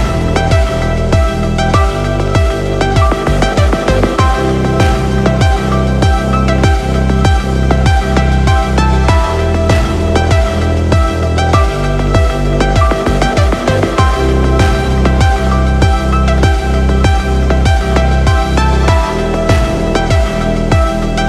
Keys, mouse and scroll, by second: 0.3 click, 4.2-4.9 scroll down 2, 4.9-5.5 scroll down 5, 6.7-9.7 drag, 10.8-12.0 scroll up 3, 12.0 click, 13.6-14.0 scroll down 4, 16.3-18.1 shift+drag, 20.4-21.2 drag.